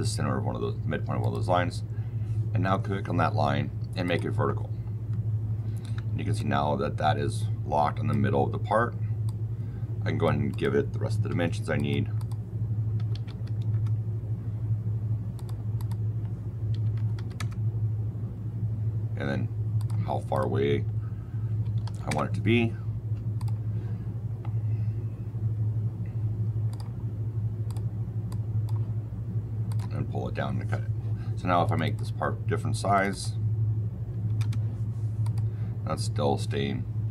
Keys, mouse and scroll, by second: 1.1 click, 3.9 click, 5.7 Escape, 6.3 click, 9.2 click, 10.4 click, 11.2 d, 11.7 click, 12.1 click, 12.9 KP_1, 13.0 KP_Decimal, 13.2 KP_5, 13.6 KP_Enter, 15.3 click, 15.7 click, 16.6 KP_Decimal, 16.9 KP_1, 17.1 KP_5, 17.3 KP_Enter, 19.7 click, 20.2 click, 21.4 KP_Decimal, 21.7 KP_7, 21.8 KP_5, 22.0 KP_Enter, 23.3 click, 26.6 click, 27.6 click, 28.2 click, 29.6 click, 31.5 click, 31.7 click, 32.9 click, 33.0 click, 34.2 KP_6, 34.3 KP_Enter, 35.4-37.1 drag.